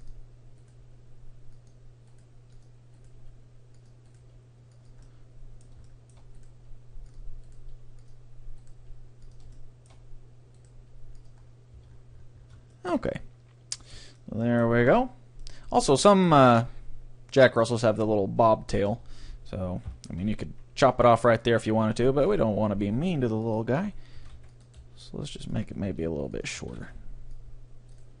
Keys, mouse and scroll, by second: 0.8 g, 2.4 g, 3.2 g, 4.3 g, 4.6-5.9 right drag, 5.1-7.6 middle drag, 6.4-8.9 right drag, 6.6 g, 7.2-8.9 drag, 7.7 g, 8.9 g, 9.1 right click, 10.8 g, 11.4-12.9 drag, 11.4-14.0 middle drag, 11.4 right click, 11.9 Tab, 15.1-18.9 middle drag, 18.9 Tab, 19.9 KP_3, 20.1 a, 20.5 c, 22.5-26.3 drag, 22.5 g, 24.2 a, 24.3 c, 24.8 g, 25.9 r, 26.5-28.2 drag, 26.7 a, 26.8 c.